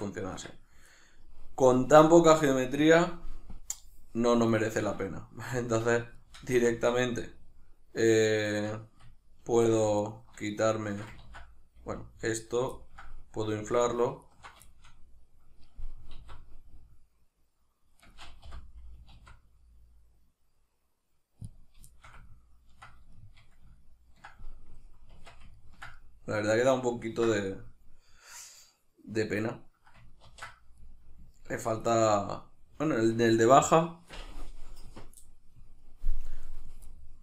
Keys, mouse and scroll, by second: 0.3 Tab, 3.6-4.9 drag, 4.9-5.6 middle drag, 5.6 alt+q, 6.2 shift+middle click, 6.5 Tab, 7.1 ctrl+middle click, 10.0 alt+right click, 10.5 alt+shift+right click, 11.2 ctrl+z, 12.7-13.8 ctrl+middle drag, 13.8 alt+shift+right drag, 14.2 alt+shift+right click, 14.7-18.1 shift+middle drag, 16.1 alt+s, 18.1 right click, 18.4 o, 19.1 alt+s, 21.6 click, 21.9-37.2 shift+middle drag, 25.2 Tab, 30.2 ctrl+2.